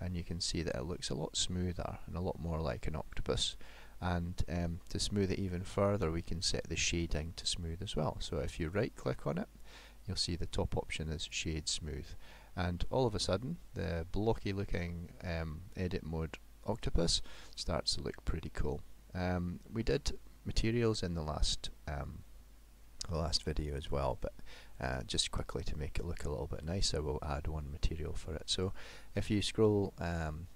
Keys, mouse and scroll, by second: 1.1-1.9 scroll down 3, 1.7 middle click, 3.3 scroll up 2, 8.6 right click, 12.3 middle click, 17.6 middle click.